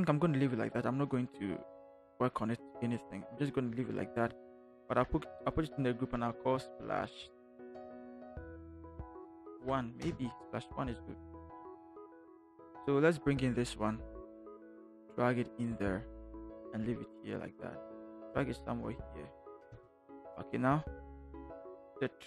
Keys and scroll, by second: 4.9 ctrl+g, 6.5-10.0 typing, 19.6 Return.